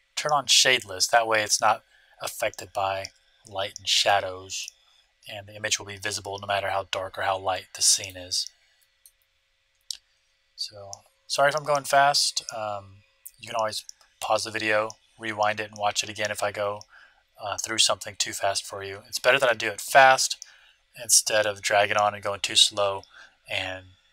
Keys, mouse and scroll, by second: 4.6-6.3 middle drag, 9.0-10.8 middle drag.